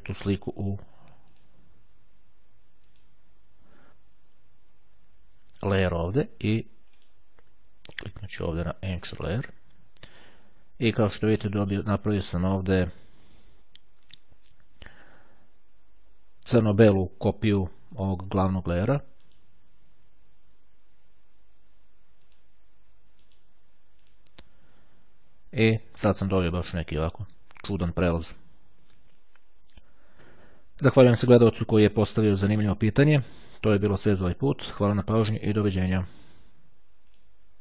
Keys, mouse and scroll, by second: 1.4 click, 3.0 click, 7.0 right click, 9.1 click, 11.5 right click, 14.2 click, 17.9 click, 19.1 right click, 22.4 click, 23.3 right click, 24.1 click.